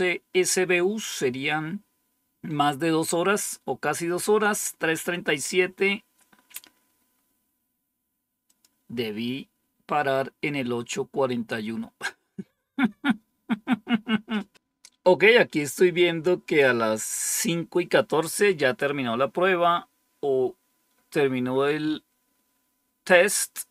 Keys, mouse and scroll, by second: 8.4 click.